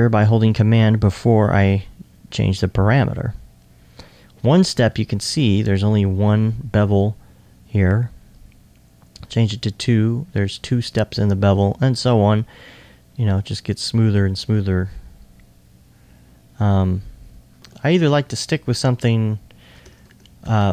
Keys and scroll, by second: 19.8 Tab.